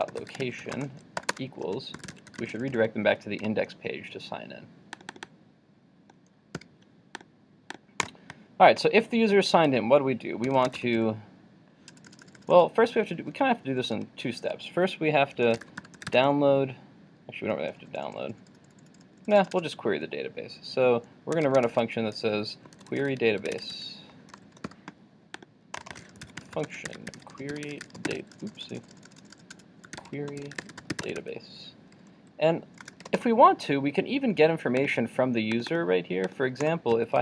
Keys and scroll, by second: 6.6 super+].